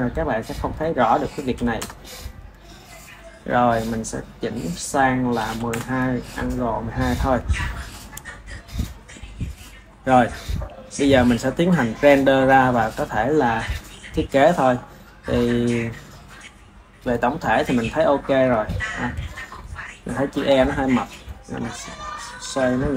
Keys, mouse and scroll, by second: 8.8-11.6 ctrl+middle drag, 11.6 ctrl+s, 17.8-18.8 shift+middle drag, 18.8 drag, 19.6-22.3 ctrl+middle drag, 22.3 r.